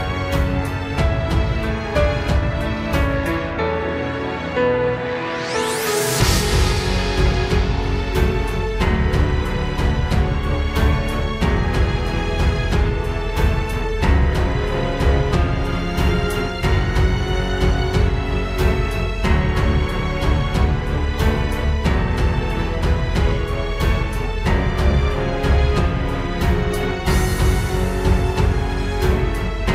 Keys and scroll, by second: 2.6 ctrl+space, 10.2 ctrl+space, 11.5 ctrl+z, 12.3 ctrl+space, 16.7 ctrl+space, 17.1 ctrl+s, 18.1 ctrl+z, 21.7 ctrl+j, 22.3 ctrl+g, 26.8 ctrl+g.